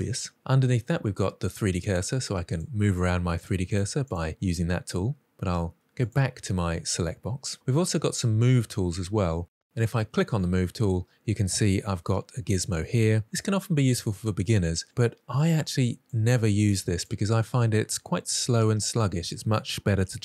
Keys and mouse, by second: 1.7 click, 2.3 click, 2.7 click, 3.1 click, 3.4 click, 3.7 click, 6.0 click, 14.3-14.8 drag, 15.5-16.0 drag, 16.6-16.9 drag, 17.5-18.7 drag.